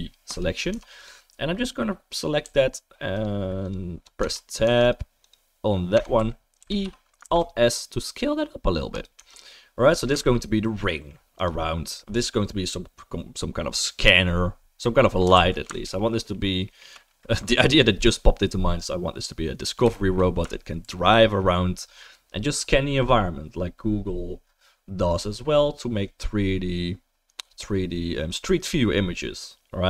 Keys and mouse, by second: 0.7 Tab, 2.4 a, 3.1 click, 3.6 click, 4.2 Tab, 4.6 Tab, 4.9 right click, 5.2 click, 5.2 middle click, 5.4-9.9 drag, 5.9 Tab, 6.2 a, 6.6 e, 7.2 alt+s, 9.1 Tab, 9.9-14.0 ctrl+right drag, 10.2 ctrl+s, 11.4 click, 11.4 middle click, 14.0-15.9 middle drag, 15.3 ctrl+s, 15.9 alt+right click, 16.0 alt+middle click, 16.1 alt+right click, 16.3 alt+middle click, 16.4 alt+right click, 16.7 alt+middle click, 16.7-19.9 alt+right drag, 19.9-23.9 shift+middle drag, 20.8 ctrl+s, 23.9-29.8 right drag.